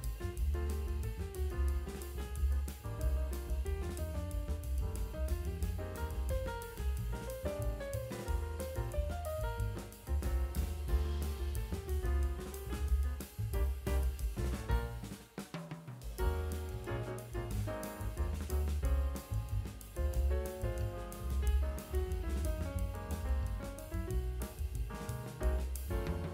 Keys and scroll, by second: 1.9 space, 3.4 space, 6.7 [, 10.0 space, 13.0 space, 14.0 space, 16.8 space, 17.1 space.